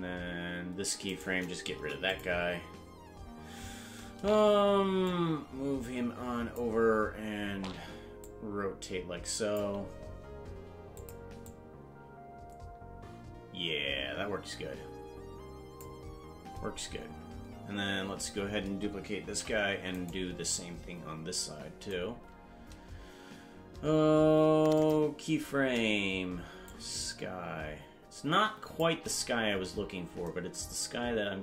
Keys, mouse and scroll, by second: 1.0 right click, 1.7 Delete, 5.1-6.6 drag, 6.8-7.2 scroll down 2, 7.4 scroll up 3, 8.2-9.7 drag, 11.0 click, 11.5-15.9 drag, 22.1 scroll down 1, 24.7 click, 26.6-28.8 shift+drag.